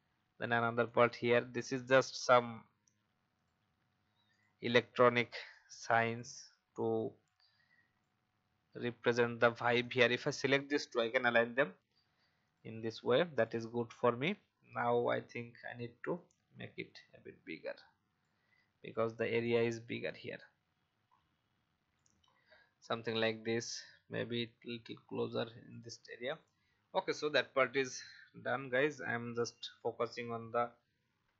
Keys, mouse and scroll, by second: 0.8 right click, 3.3-8.5 drag, 9.8 shift+click, 11.0 click, 16.1-18.2 shift+drag, 19.4 click, 20.4-21.9 shift+drag, 24.4 shift+click, 26.3 click, 26.8 alt+scroll down 1, 27.9 click, 29.2 Delete.